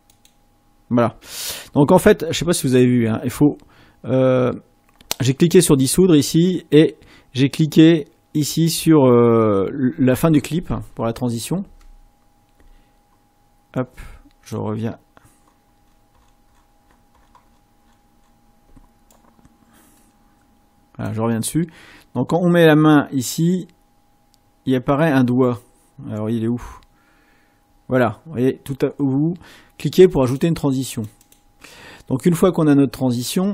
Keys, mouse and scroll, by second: 11.2-11.6 ctrl+scroll up 2, 16.9 click, 17.3 click.